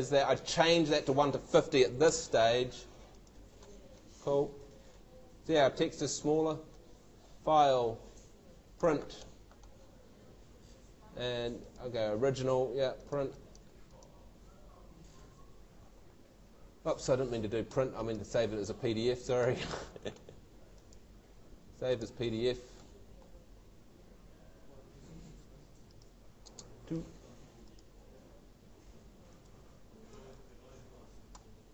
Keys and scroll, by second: 1.9 shift+5, 2.2 shift+0, 26.4 shift+space, 26.6 shift+2, 30.1 shift+super+Tab.